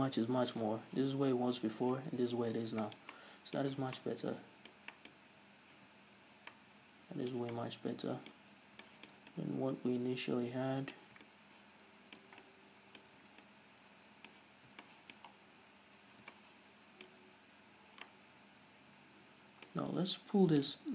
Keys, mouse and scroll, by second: 1.1 ctrl+z, 2.3 ctrl+shift+z, 3.0 scroll down 1, 3.3-20.9 shift+middle drag, 4.2 scroll down 2, 6.2 z, 7.9 Tab, 8.8-9.3 scroll up 2, 13.7 Tab, 15.6 scroll up 1.